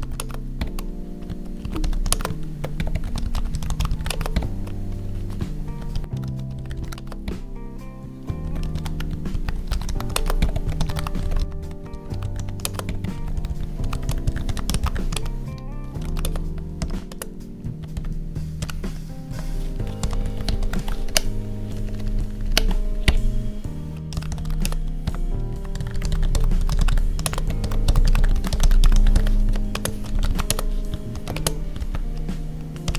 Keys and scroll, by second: 0.1 space, 2.1 space, 4.1 space, 6.9 space, 10.1 space, 12.6 space, 15.4 Right, 16.1 space, 17.0 space, 19.2 Tab, 19.7 Right, 20.2 ctrl+s, 20.7 ctrl+s, 21.0 Down, 21.7 ctrl+Down, 24.5 space, 27.2 space, 29.4 Right, 29.7 space, 30.4 space, 31.3 space.